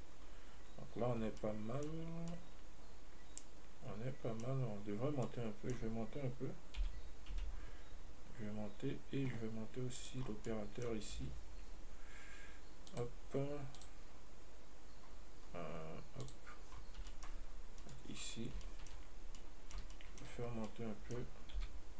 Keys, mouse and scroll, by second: 11.4 Tab, 13.1 click, 14.0 click, 16.5 click, 17.0-17.4 scroll down 2, 17.4 shift+middle click, 18.0 right click, 18.4-18.9 scroll up 3, 18.9 shift+middle click, 19.2-19.6 shift+scroll up 2, 19.6-20.6 middle drag, 20.6 scroll up 2, 20.9 middle click, 21.8 g.